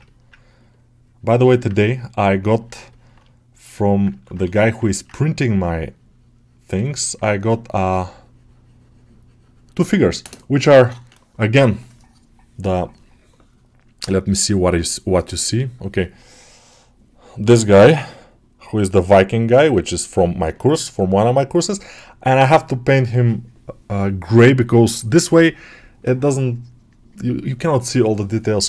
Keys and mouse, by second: 0.3-1.4 ctrl+drag, 1.4 middle click, 2.4 click, 2.8 alt+middle click, 3.2 shift+click, 3.6 alt+middle click, 4.0 ctrl+alt+middle click, 4.7 middle click, 5.2-6.9 ctrl+drag, 6.9 alt+middle click.